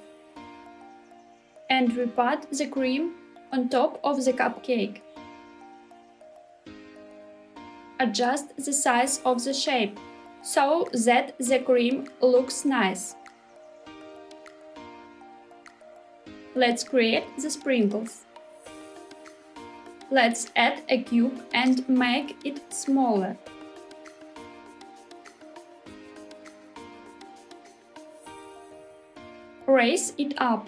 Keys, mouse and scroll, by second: 0.2 shift+middle click, 1.4 g, 2.2 z, 5.6 click, 6.1 middle click, 6.9 shift+middle click, 7.5 s, 8.7 click, 9.2 g, 9.9 z, 10.5 click, 11.2 s, 13.5 click, 13.9 middle click, 14.4 g, 14.7 z, 16.4 click, 16.5 middle click, 19.8 shift+a, 24.5 s, 28.3 click, 29.4 g, 29.9 z.